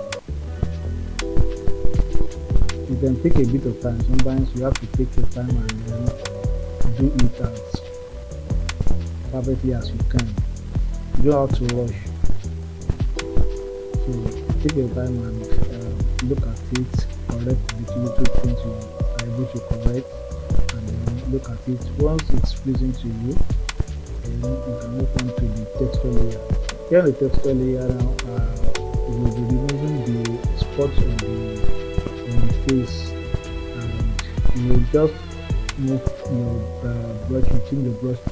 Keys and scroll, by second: 24.4 s, 27.1 ].